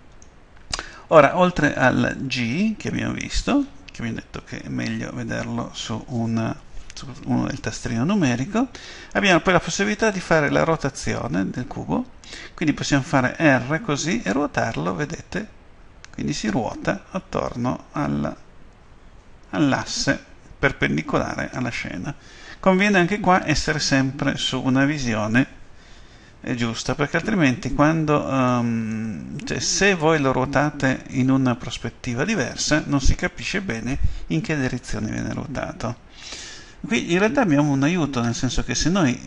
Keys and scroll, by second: 13.8 r.